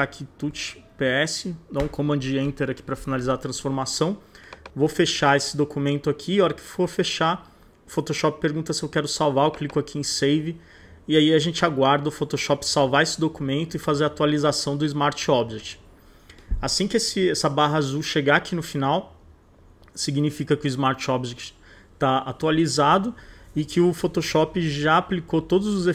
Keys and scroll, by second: 0.0-0.5 typing, 1.5 super+s, 1.8 super+Return.